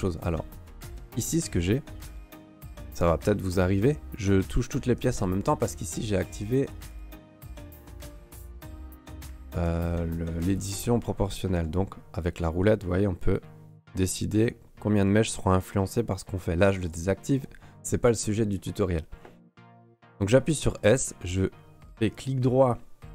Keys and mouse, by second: 3.2 s, 6.9 click, 8.7 s, 10.6 click, 11.5 s, 16.8 click, 20.4 s.